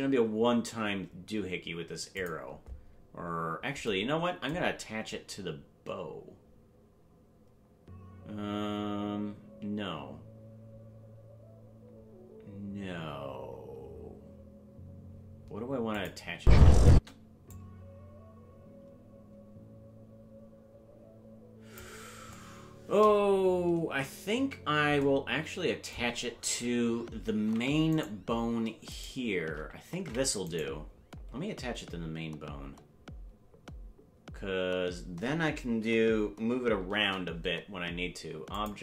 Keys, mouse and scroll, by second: 15.9 click, 16.4 space, 16.9 space, 17.5-21.8 drag, 27.2 ctrl+Tab, 29.0 shift+right click, 30.0 ctrl+Tab, 30.5 right click, 36.7 ctrl+p.